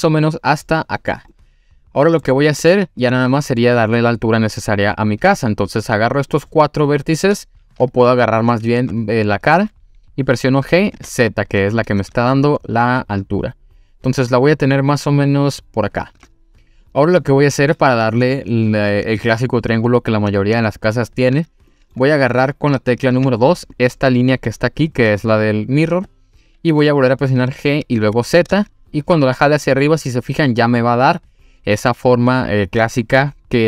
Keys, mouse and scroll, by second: 0.3 click, 0.7 middle click, 1.3 middle click, 2.8 middle click, 5.0 click, 5.7 click, 8.5 click, 8.8 3, 9.0 click, 10.6 g, 10.9 z, 15.9 click, 20.6-21.4 shift+middle drag, 21.7 middle click, 23.1 2, 23.7 click, 27.4 g, 28.0 z.